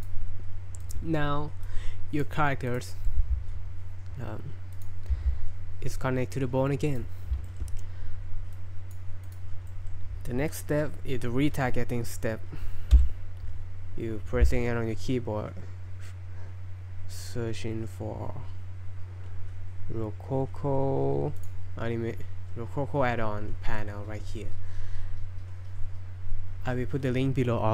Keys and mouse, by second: 0.0 right click, 0.8 right click, 1.6-2.2 drag, 2.7 right click, 2.9 middle click, 4.8 click, 4.8 r, 5.1 r, 7.5 shift+click, 8.6-9.0 drag, 9.3 click, 9.7 middle click, 13.0 n.